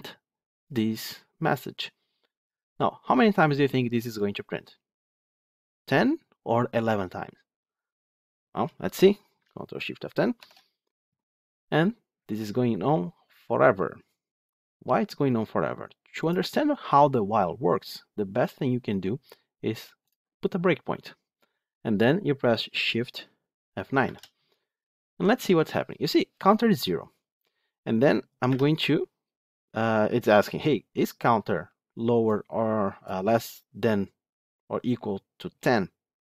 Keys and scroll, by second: 10.3 ctrl+shift+F10, 16.3 ctrl+F2, 19.9 ctrl+F8, 23.9 shift+F9, 28.4 F8.